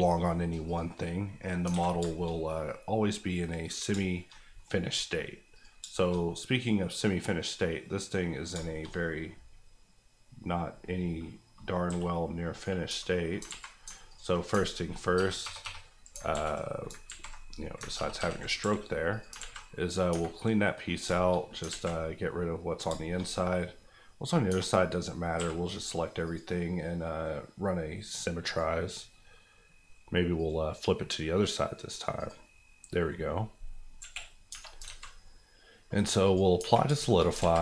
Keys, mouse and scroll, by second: 0.6 click, 1.0 KP_Decimal, 1.4 middle click, 1.6 alt+middle click, 1.7 alt+a, 2.0 shift+middle click, 2.3-3.9 middle drag, 3.9 shift+middle click, 4.3 middle click, 5.5 click, 5.8 shift+click, 5.9 shift+middle click, 6.1-8.5 middle drag, 8.5 shift+middle click, 8.8 middle click, 8.9-9.2 scroll up 1, 9.2 middle click, 11.9 g, 12.5 right click, 12.9 Tab, 13.1 middle click, 13.4 alt+z, 13.8 alt+z, 14.1 alt+click, 14.4 click, 14.6 ctrl+click, 15.1 ctrl+KP_Add, 16.3 ctrl+z, 16.9 ctrl+z, 17.8 ctrl+z, 17.9 ctrl+KP_Add, 18.5 KP_Add, 18.6 x, 19.1 click, 19.3 alt+click, 19.4 alt+z, 19.6 middle click, 20.1 Tab, 20.4 middle click, 21.0 shift+middle click, 21.3 middle click, 21.6 alt+middle click, 21.7 alt+z, 22.0 middle click, 22.7-23.1 scroll down 2, 23.2 shift+middle click, 24.5 Tab, 25.3 a, 26.2 click, 29.8 F9, 30.3 click, 33.1 middle click, 33.4 scroll down 1, 34.0 KP_1, 34.5 Tab, 34.8 alt+z, 35.2 scroll up 1, 36.2 click, 36.5 Tab, 37.0 shift+middle click, 37.2 shift+scroll up 1, 37.4 alt+z.